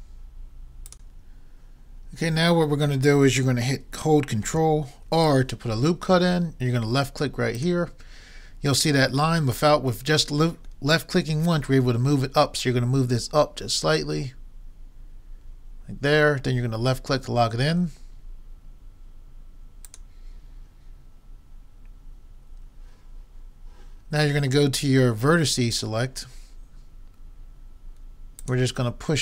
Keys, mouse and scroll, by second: 5.0 ctrl+r, 25.8-27.6 drag, 28.4-29.2 drag.